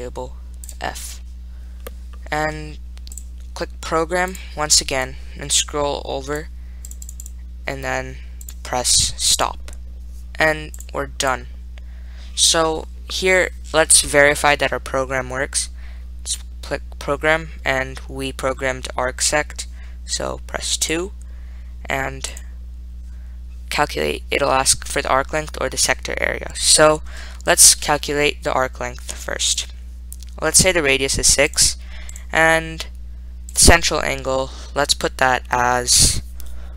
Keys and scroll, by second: 1.5-2.3 typing, 3.5 Return, 6.5 Down, 7.1 Down, 7.3 Down, 7.5 Down, 8.7 Up, 9.7 Return, 9.9-10.7 typing, 20.1 Down, 20.1 Up, 20.1 Right, 20.1 Return, 20.8 Up, 21.1 2, 22.6 Return, 29.8 Return, 31.9 6, 33.8 Return.